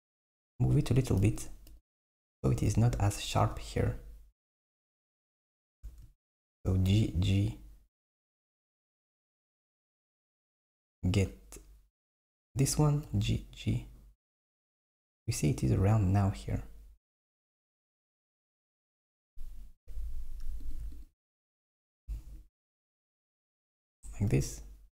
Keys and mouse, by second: 1.7 KP_7, 2.7 KP_1, 5.9 alt+z, 6.9 g, 11.3 click, 12.1 alt+click, 13.1 g, 20.7 click, 21.1 alt+click, 22.0 g.